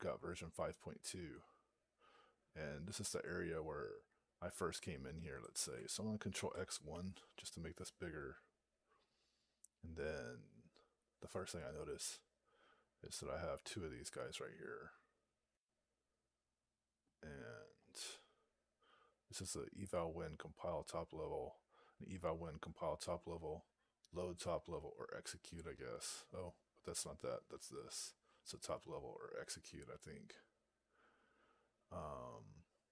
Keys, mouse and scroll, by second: 15.5-20.8 scroll up 4, 30.1-30.9 scroll up 1, 30.9-32.9 scroll up 4.